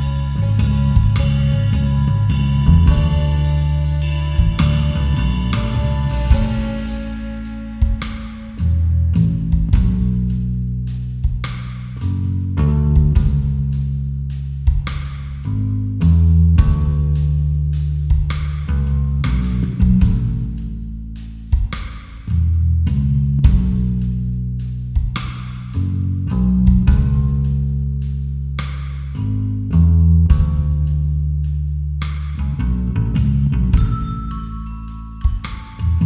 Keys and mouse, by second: 0.6 alt+shift+click, 2.8 alt+shift+click, 7.9 ctrl+b, 11.8 click, 12.8 Tab, 14.0 ctrl+2, 14.5-15.2 middle drag, 19.5 KP_7, 20.1 KP_3, 21.2 g, 21.9 y, 23.8 click, 25.0-26.6 drag, 27.8 click, 30.1 click, 34.9 click, 35.3 click, 35.8 Delete.